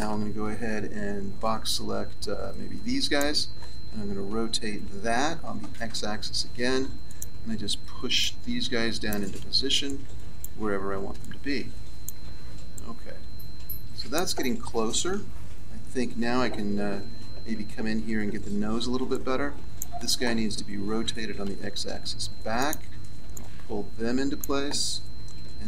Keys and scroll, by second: 5.0 r, 16.2 a, 18.9 b, 25.4 a.